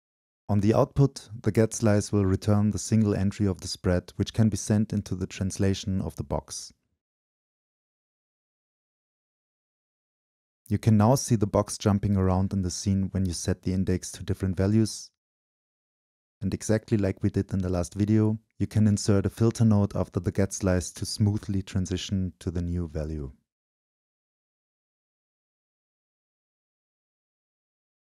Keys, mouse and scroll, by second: 1.7-2.4 scroll up 2, 2.4 scroll up 1, 2.5-5.0 right drag, 5.2 click, 5.5-6.4 middle drag, 6.4 right click, 6.8-21.2 drag, 21.8-24.9 drag.